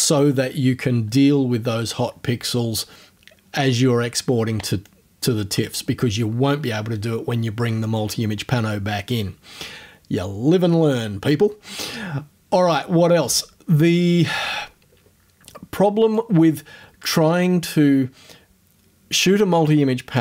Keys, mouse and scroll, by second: 14.2-14.9 scroll up 1, 16.2-17.2 drag.